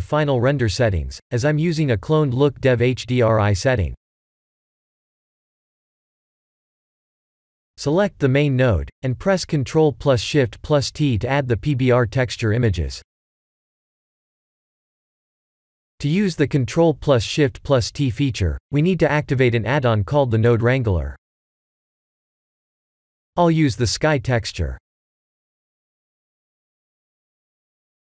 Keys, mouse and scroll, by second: 3.2 click, 6.3 click, 7.8 click, 8.1 ctrl+shift+t, 18.0 click, 20.4 click, 22.4 click, 25.3 click.